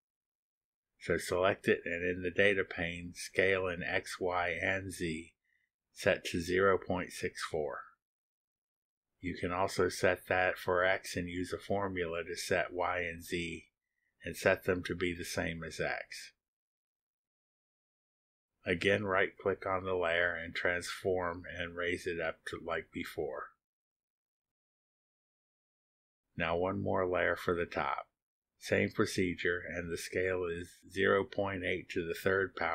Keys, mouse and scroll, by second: 0.0-1.7 typing, 2.8 Tab, 3.6 click, 4.0 0, 4.6 8, 5.5 shift+8, 8.6-9.7 typing, 11.6 click, 12.6-15.3 typing, 15.5 Return, 16.0 click, 16.5 click, 16.6-17.9 typing, 17.9 Return, 18.2 Return, 19.3-20.5 drag, 21.4-22.6 drag, 23.2-23.8 middle drag, 25.0 click, 26.9 click, 27.9 click, 28.7 click, 29.1 0, 29.4 ., 30.0 Tab, 31.2 click, 31.4-32.3 typing, 32.4 Return.